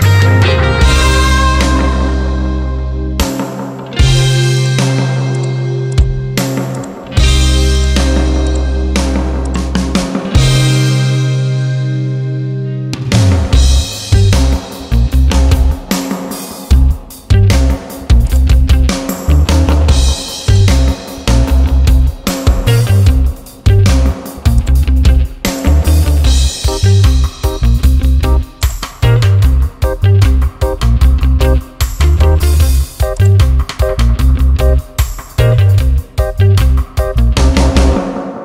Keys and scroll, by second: 15.2 ctrl+t, 22.4 Return, 30.8 ctrl+t, 35.4 Return.